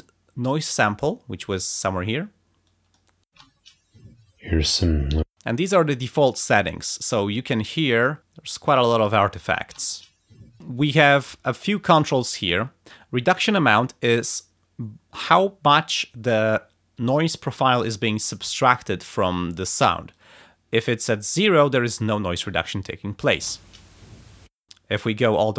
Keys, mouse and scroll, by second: 2.7 click, 3.3 space, 5.2 space, 8.2 space, 9.6 space.